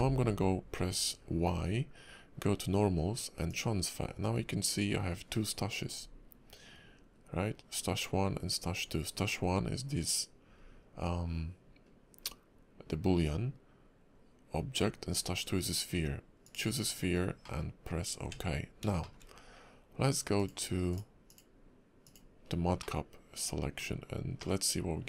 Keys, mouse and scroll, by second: 0.0 scroll up 1, 0.0 y, 17.0 scroll down 3, 17.4 middle click, 17.8 scroll up 2, 18.2 Tab, 19.0 shift+middle click, 20.3 click, 22.4-22.8 scroll down 3, 22.8 middle click, 23.9 scroll up 3, 24.4 middle click.